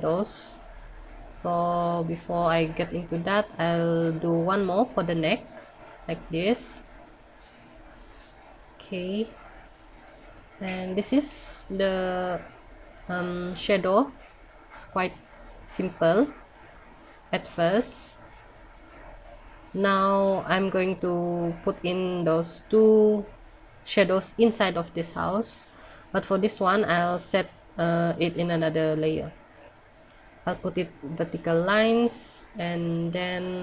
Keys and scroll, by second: 7.4 scroll up 1, 12.6 scroll down 1, 16.9 ctrl+z.